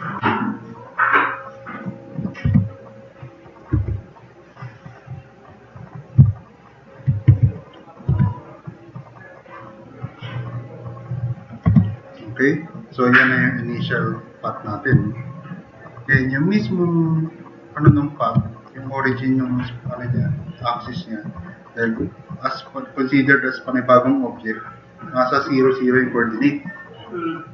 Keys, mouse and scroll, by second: 0.6-2.2 drag, 2.5-3.0 drag, 2.5 t, 7.4 click, 7.4 q, 8.1 r, 11.7 4, 12.4 click.